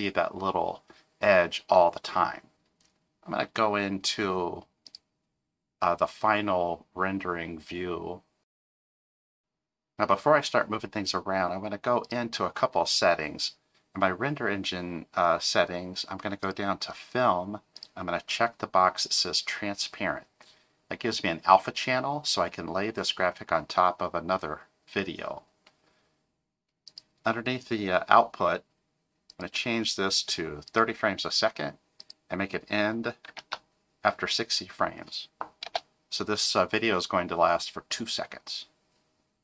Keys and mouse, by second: 5.2-8.1 drag, 12.0 click, 16.4 click, 17.8 click, 29.3-30.8 drag, 32.0-38.9 drag.